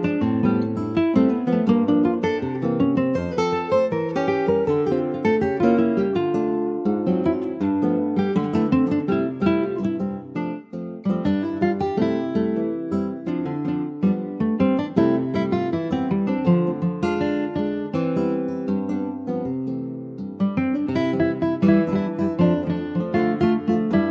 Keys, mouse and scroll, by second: 0.2 shift+a, 1.6 alt+middle click, 2.2 ctrl+s, 2.6 alt+middle click, 3.4 click, 4.5 s, 6.7 s, 7.9 alt+middle click, 8.5 ctrl+s, 8.6-9.6 scroll up 2, 9.6 scroll up 3, 9.6 click, 10.8 s, 12.5 click, 13.7 shift+middle click, 14.1 shift+scroll up 4, 14.7 shift+middle click, 15.6-17.7 drag.